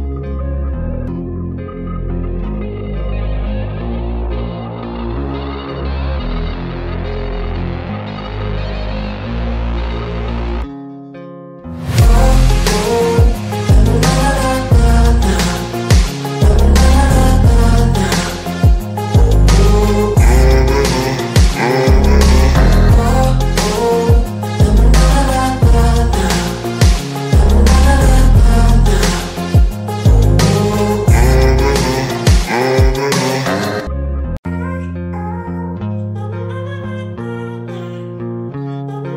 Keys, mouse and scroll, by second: 2.0 z, 2.6-3.6 click, 3.9 space, 4.1 click, 4.3-4.7 space, 5.8-7.8 drag, 30.8-35.6 drag, 36.2-39.1 drag.